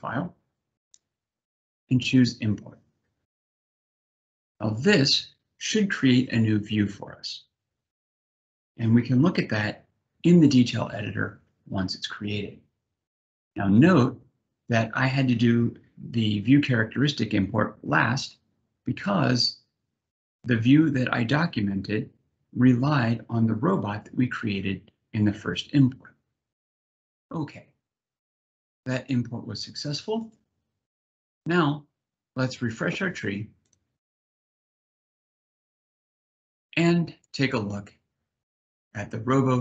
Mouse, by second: 3.0 click, 29.9 click.